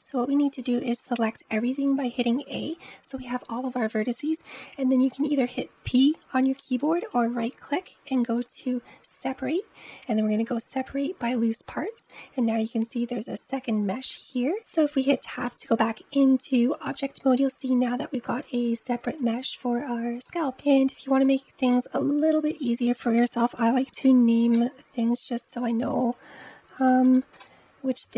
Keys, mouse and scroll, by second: 1.8 a, 6.9-10.0 right drag, 14.6 Tab, 15.0-16.5 middle drag, 16.5 click, 17.6 click, 18.4 click, 19.1 click, 20.1-20.4 middle drag, 22.0-25.1 drag, 25.7 click, 25.9-28.1 drag.